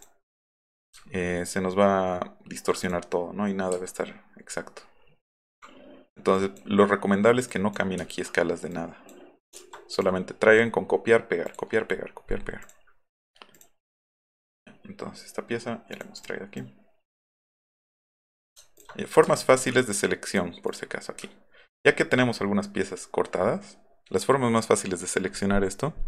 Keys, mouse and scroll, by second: 1.0-1.4 alt+scroll up 4, 1.7 alt+middle click, 1.9 alt+middle click, 2.2 alt+middle click, 2.5 alt+middle click, 2.8 click, 3.8 alt+middle click, 3.8 alt+scroll up 2, 4.6 alt+middle click, 4.6 alt+scroll down 2, 6.3 click, 7.5 drag, 8.0 alt+middle click, 8.7 click, 9.6 ctrl+z, 10.0 click, 12.6 click, 13.5 click, 14.0 click, 14.2 click, 15.9 click, 16.2 click, 16.6 click, 19.3-19.6 alt+scroll down 2, 20.3 click, 20.7 click, 21.2-22.5 alt+scroll up 10, 23.4 alt+middle click.